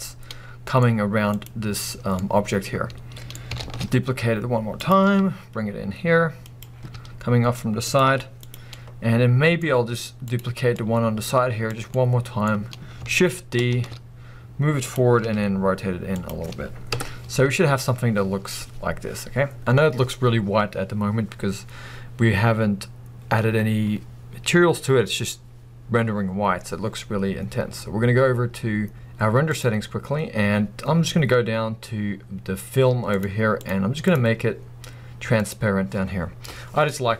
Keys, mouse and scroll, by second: 1.3 click, 2.2-4.9 middle drag, 3.6 shift+d, 4.9 click, 5.1 r, 6.6 click, 6.9 r, 8.0 click, 8.1 g, 8.5 click, 8.8-10.3 middle drag, 10.3 click, 10.8-14.0 middle drag, 11.6-11.9 scroll down 2, 13.7 shift+d, 14.7 middle click, 14.9 click, 15.2 r, 16.2 click, 16.9 KP_0, 17.6 scroll up 1, 29.5 click, 33.0-35.6 drag, 36.2 scroll up 1.